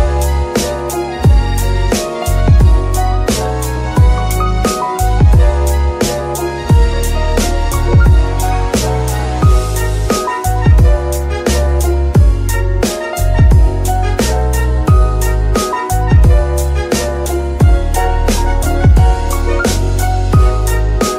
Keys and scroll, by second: 2.3 g, 3.3 F2, 5.4-6.9 typing, 7.5 Return, 9.0 Tab, 9.9 shift+s, 10.8 Tab, 11.3 shift+s, 12.5 KP_3, 13.5 z, 14.8 shift+Tab, 16.3 Tab, 17.0 g, 18.4 Tab, 18.9 shift+s, 21.0 Tab.